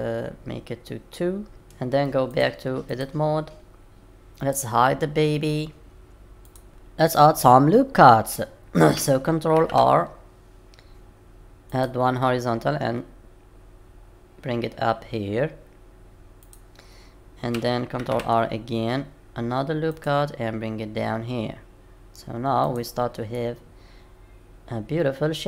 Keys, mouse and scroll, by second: 2.3 click, 3.7-4.1 scroll up 3, 4.1 click, 6.4 click, 9.5 ctrl+r, 18.0 ctrl+r, 23.3 middle click.